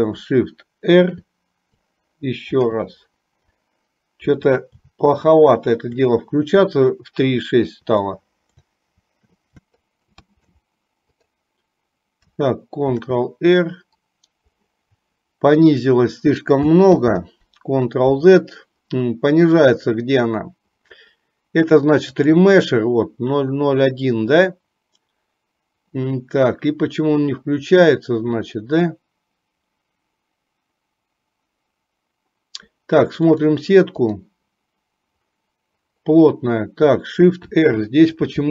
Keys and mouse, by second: 1.0 shift+r, 2.7 shift+r, 4.5 shift+r, 8.0 shift+r, 9.1-9.5 shift+r, 9.6 click, 10.0-11.1 right drag, 13.3 ctrl+r, 17.0 ctrl+z, 22.3-33.3 drag, 34.1 click, 37.4 shift+r.